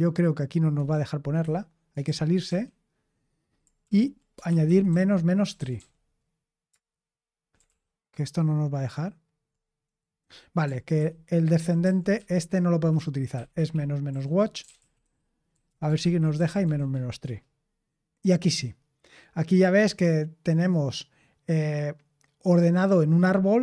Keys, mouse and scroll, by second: 0.7 Escape, 1.3 q, 2.0 super+h, 2.4 q, 3.7 ctrl+p, 4.1-6.2 typing, 6.6 Return, 7.6 ctrl+p, 10.9 ctrl+w, 11.5 ctrl+w, 11.7 ctrl+w, 12.1 ctrl+w, 13.5-17.3 typing.